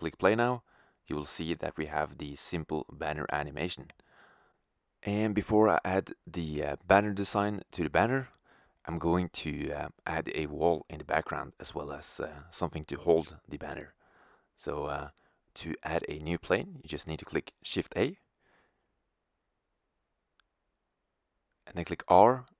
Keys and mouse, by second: 1.0-3.9 middle drag, 4.7-7.1 drag, 7.1-9.4 middle drag, 12.8-15.3 middle drag, 17.7 shift+a, 22.0 r.